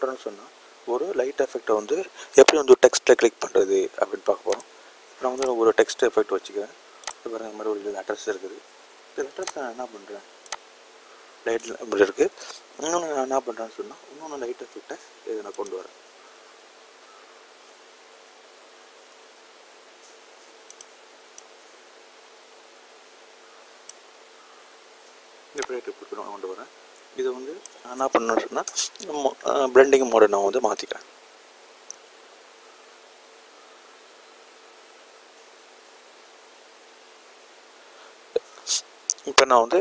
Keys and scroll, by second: 5.0 i.